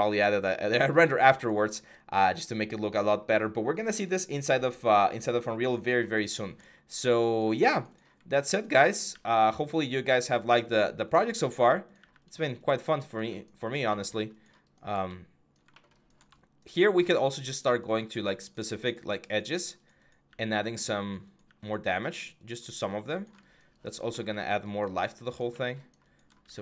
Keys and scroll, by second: 8.9 x, 10.9-11.7 typing, 17.7 typing.